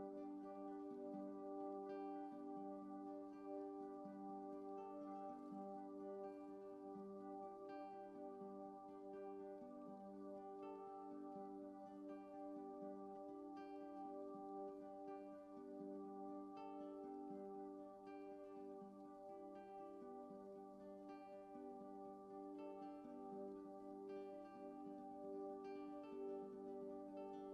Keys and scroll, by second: 14.9 ctrl+z, 20.1 x, 21.8 x.